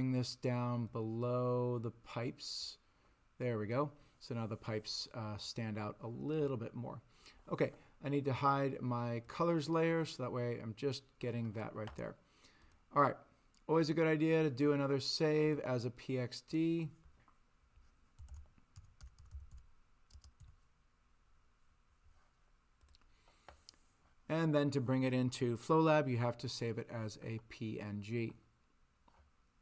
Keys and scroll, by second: 18.0-20.4 typing.